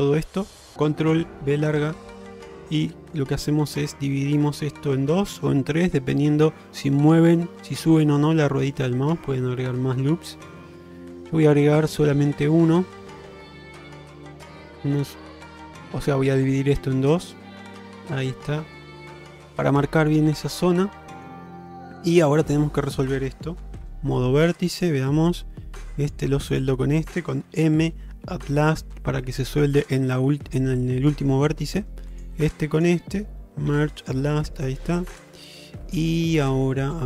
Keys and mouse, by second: 2.0 ctrl+b, 18.6-19.7 middle drag, 20.1 middle click, 21.1 shift+middle click, 21.8 middle click, 23.8 1, 24.8 click, 26.1 click, 27.6 m, 30.8 middle click, 32.2 click, 33.8 m, 34.8-37.0 middle drag.